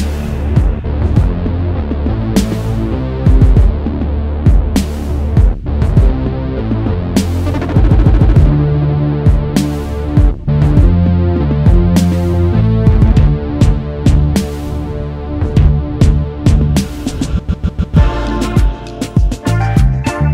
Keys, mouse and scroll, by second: 0.3 alt+scroll down 1, 0.9 space, 1.0 double click, 4.2 alt+scroll down 1, 5.2 alt+scroll up 1, 5.9 double click, 6.9 shift+click, 8.9 double click, 11.1 alt+scroll down 1, 11.2-11.7 alt+scroll up 1, 12.1 alt+scroll down 1, 12.8 shift+click, 19.0 right click.